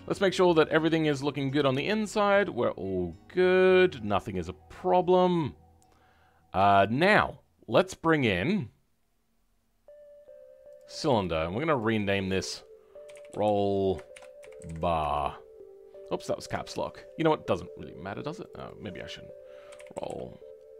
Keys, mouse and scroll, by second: 5.6 scroll down 2, 6.6-10.6 shift+middle drag, 10.6 click, 14.9 l, 18.5-20.7 drag.